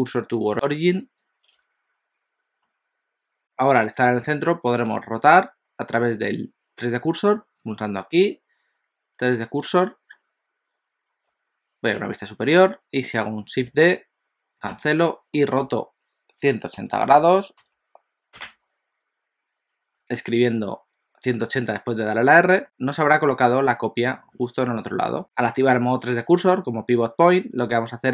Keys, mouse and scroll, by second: 2.6 middle click, 7.4 click, 12.0 KP_7, 13.8 shift+d, 15.7 r, 22.6 middle click, 23.8 middle click, 24.6 alt+a, 25.2 click.